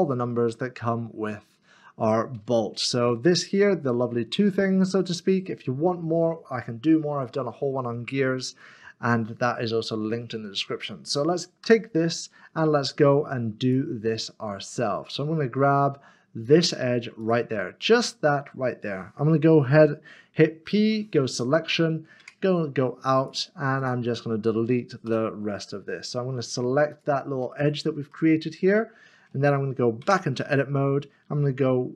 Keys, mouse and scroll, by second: 6.9 middle click, 11.6 Tab, 13.6 Tab, 15.0 shift+click, 16.4 shift+click, 17.2 shift+click, 17.8 middle click, 21.3 click, 22.2 Tab, 23.2 click, 25.8 Delete, 26.9 click, 27.4 middle click, 30.0 Tab.